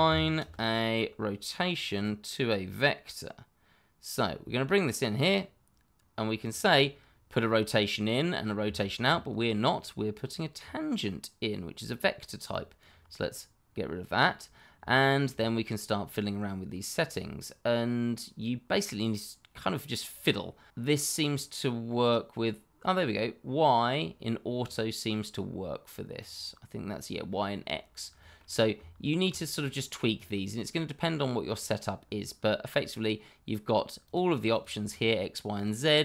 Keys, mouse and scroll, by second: 0.0-0.4 typing, 1.9 click, 6.4 click, 8.8 middle click, 8.8 shift+middle click, 10.2 click, 12.5 ctrl+right click, 14.1 scroll up 1, 14.9 shift+middle click, 15.7 middle click, 20.5 click, 22.4 middle click, 24.9 click, 27.2 middle click, 28.7 shift+middle click, 28.8 middle click, 28.8 shift+middle click, 29.5-30.1 scroll up 1, 30.1 click, 34.0 click, 34.6 double click, 35.5 click.